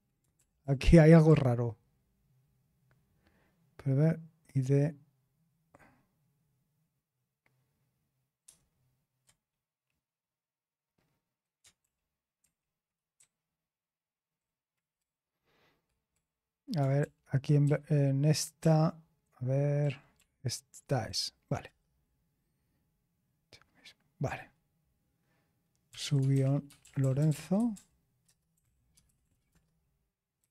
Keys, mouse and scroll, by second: 0.4 ctrl+p, 0.6 ctrl+p, 1.3 ctrl+p, 8.4 ctrl+p, 11.8 ctrl+p, 12.4 ctrl+n, 13.2 BackSpace, 13.8 Left, 13.8-14.4 Left, 15.0 BackSpace, 15.7 BackSpace, 17.0-17.6 BackSpace, 25.6-30.5 typing.